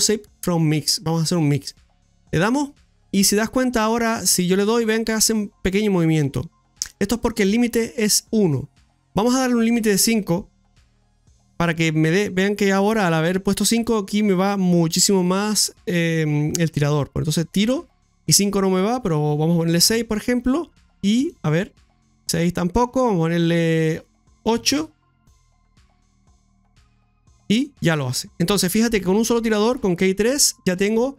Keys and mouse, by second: 4.1-6.9 drag, 9.7-11.5 drag, 16.8 click, 18.7-20.4 drag, 21.3-22.9 drag, 23.8-25.0 drag, 26.8 click, 30.4-31.1 drag.